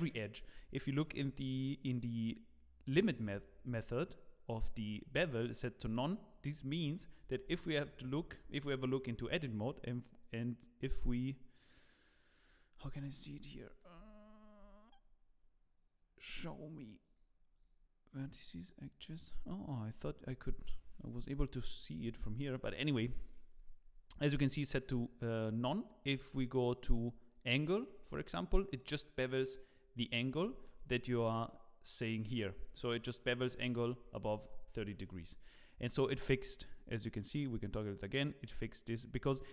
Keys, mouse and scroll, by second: 2.8 click, 6.5-6.8 scroll down 3, 6.8 middle click, 7.3 Tab, 7.7 scroll down 2, 8.1-8.7 scroll up 2, 8.9 shift+middle click, 9.2 shift+scroll up 1, 10.2 click, 11.0 click, 12.3 click, 12.8 click, 13.1 scroll up 5, 13.5 shift+middle click, 13.9 shift+scroll up 1, 15.8-16.3 scroll up 6, 16.6 click, 17.0 click, 17.6-21.7 click, 21.7-23.0 scroll down 4, 22.0 Tab, 23.1 shift+middle click, 25.3 click, 33.9-34.2 scroll down 2, 34.5-34.9 scroll down 8, 34.9 shift+middle click, 35.2 click, 35.7 scroll up 5, 36.1 shift+middle click, 37.1 click.